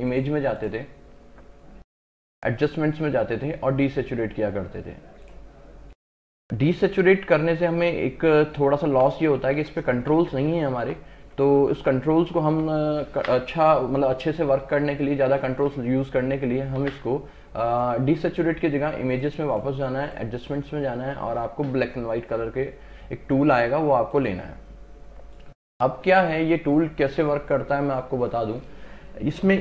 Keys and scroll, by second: 7.0 ctrl+KP_Add, 9.0 ctrl+KP_Subtract, 9.6 ctrl+KP_Add, 10.0 ctrl+KP_Subtract, 10.5 ctrl+KP_Add, 10.8 ctrl+KP_Subtract, 11.3 ctrl+KP_Add, 11.6 ctrl+KP_Subtract, 16.8 ctrl+alt+z.